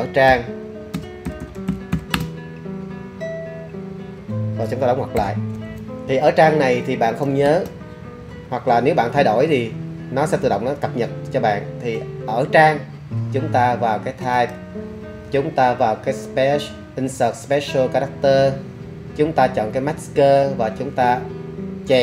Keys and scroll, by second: 0.0-2.1 typing, 5.2 shift+0, 6.1 BackSpace, 6.7 BackSpace, 9.1 space.